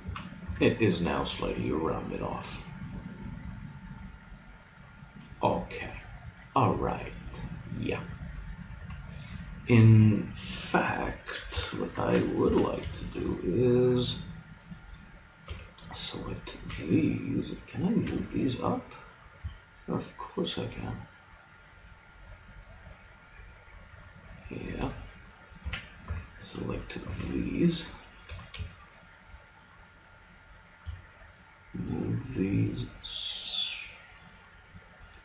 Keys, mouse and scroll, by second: 0.0 z, 0.5 Tab, 2.8-3.8 middle drag, 8.8 Tab, 9.7-11.5 middle drag, 11.5 KP_1, 12.5 z, 15.5 b, 16.7 b, 18.1 g, 25.6 a, 26.1 b, 27.1 b, 28.3 g.